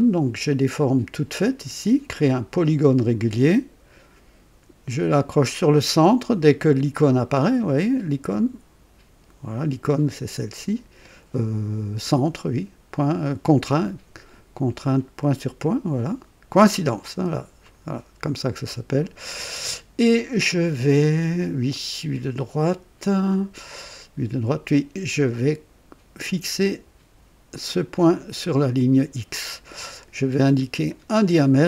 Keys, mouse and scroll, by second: 2.2 click, 17.6 click, 27.7 click, 29.5 right click, 30.8 click.